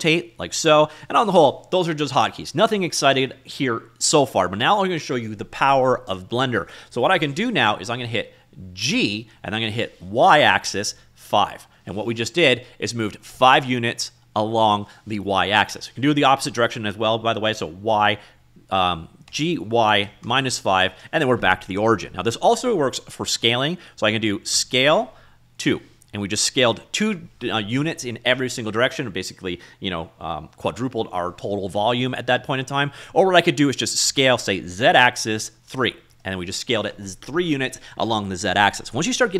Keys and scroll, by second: 0.7 ctrl+z, 9.0 g, 10.4 y, 11.2 5, 11.7 Return, 18.0 g, 19.4 y, 20.1 -, 20.3 5, 21.0 Return, 24.7 s, 25.6 2, 26.7 Return, 34.1 s, 34.8 z, 35.5 3, 36.2 Return.